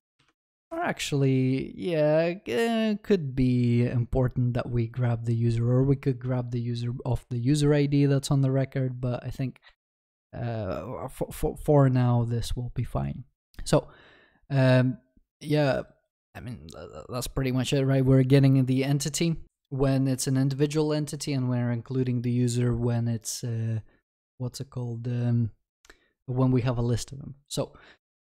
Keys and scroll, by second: 13.4 ctrl+s.